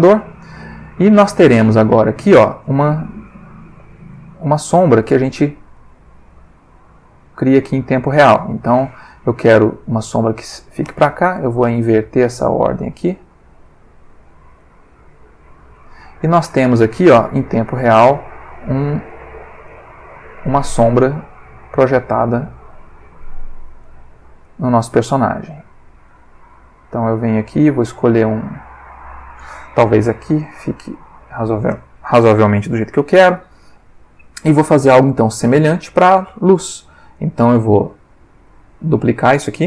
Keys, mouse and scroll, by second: 0.2 click, 0.8 middle click, 1.4 ctrl+middle click, 3.3 click, 4.7 click, 5.8 click, 6.6 click, 7.4 click, 8.1 click, 8.7 click, 9.6-10.8 drag, 11.8 click, 12.8 click, 13.6 click, 14.6 click, 16.2 click, 17.8-18.6 drag, 19.1 click, 19.7 click, 20.3-22.5 drag, 23.2 click, 23.8 click, 25.4 click, 26.1 click, 27.2-28.1 drag, 30.6 click, 33.5 ctrl+middle click, 34.0 ctrl+middle click, 35.5 click, 37.1 click, 39.0 click.